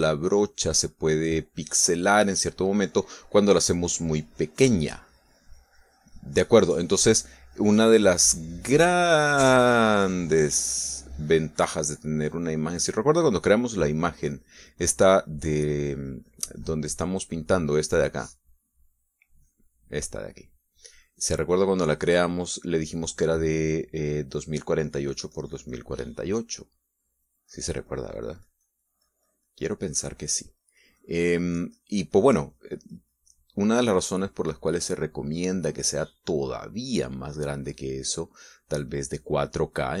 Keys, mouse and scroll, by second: 18.9-20.7 drag, 21.5-23.8 drag, 24.9 middle click, 25.9-27.4 drag, 28.1-40.0 drag.